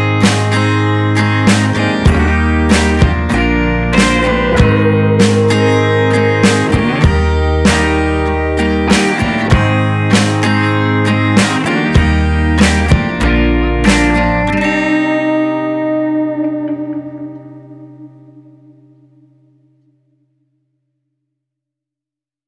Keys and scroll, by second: 15.0 Caps_Lock, 15.3 p, 15.5 a, 15.6 y, 18.6 BackSpace, 20.2 Caps_Lock, 20.5-22.4 typing.